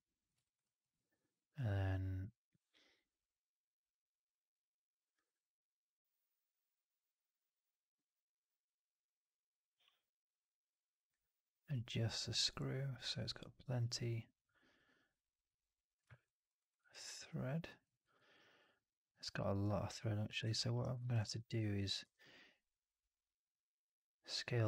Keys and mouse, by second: 0.3 right drag, 0.5 click, 2.6-5.1 drag, 16.1 alt+click, 16.5 alt+right drag, 16.7 alt+right drag, 16.9-17.7 alt+drag, 17.9 alt+right drag, 18.2-19.2 alt+right drag, 20.4 alt+drag, 20.7 alt+right drag, 20.9 alt+click, 21.1 1, 21.9 r, 24.1-24.6 middle drag.